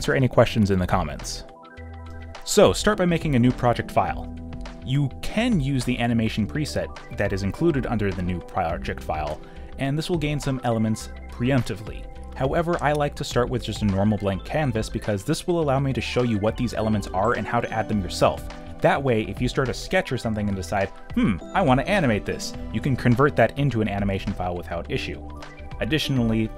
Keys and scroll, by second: 1.1 v, 6.5 ctrl+n, 18.7-20.4 typing, 21.8-23.2 typing.